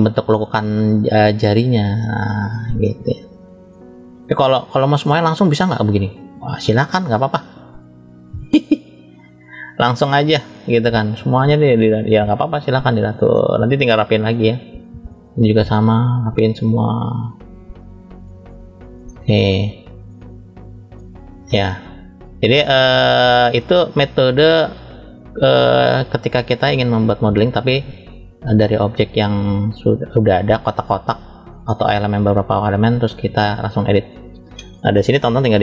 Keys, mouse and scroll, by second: 0.6 click, 3.5-4.3 scroll down 2, 4.3 middle click, 5.0-5.6 scroll down 1, 5.9 click, 13.2 middle click, 15.1 click, 17.7 click, 18.9 middle click, 19.7 click, 23.4 middle click, 23.6 click, 30.6 middle click, 31.8 click, 33.6 middle click, 34.8 shift+middle click.